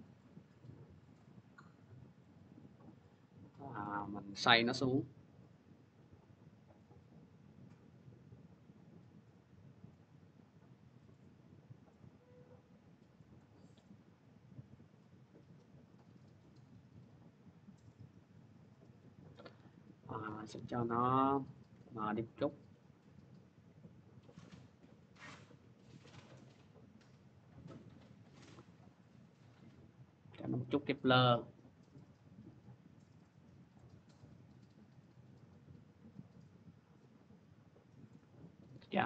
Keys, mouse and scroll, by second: 0.0 click, 1.0 click, 2.0 click, 3.8 w, 13.1 click, 18.4 click, 20.0 click, 20.4 t, 27.9-38.6 drag.